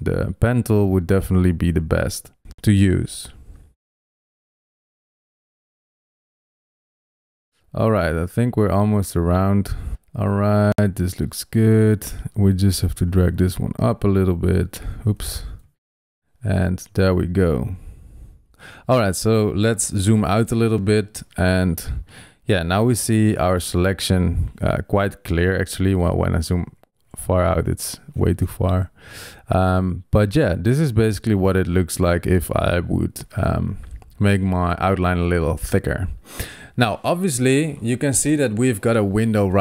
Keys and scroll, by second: 15.1 super+z, 19.7 super+-, 20.4 super+-, 23.3 super+0, 26.5 super+=.